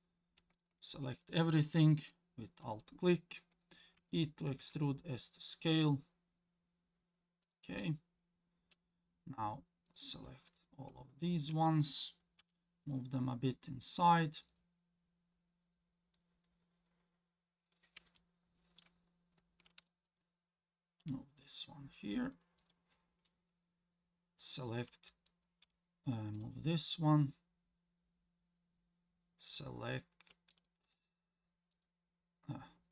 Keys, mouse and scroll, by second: 0.5 alt+click, 4.0 e, 9.9 click, 11.2 ctrl+click, 12.4 g, 17.1-18.0 scroll up 2, 18.2 shift+middle click, 19.9 click, 21.0 g, 25.3 click, 25.6 g, 30.5 click, 30.8 g.